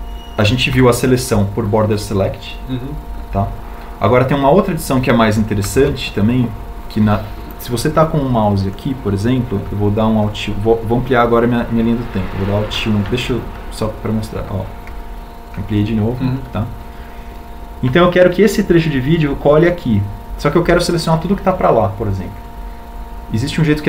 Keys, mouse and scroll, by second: 2.7 b, 7.6 alt+a, 17.0 alt+1.